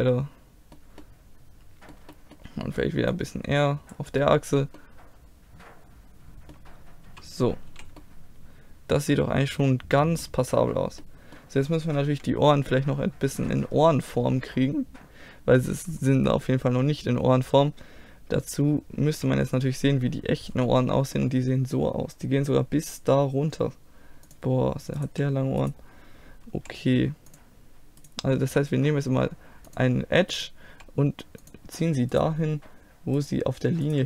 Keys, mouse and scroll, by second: 3.2-5.1 drag, 5.8-7.1 middle drag, 7.1 a, 7.8 z, 8.0 middle click, 8.9-10.0 middle drag, 11.1-12.9 middle drag, 12.1 KP_1, 19.1 z, 20.1-23.7 middle drag, 24.3-26.9 drag, 25.0-26.3 right drag, 26.6 g, 28.1 right click, 28.5 g, 29.6 click, 30.7 g.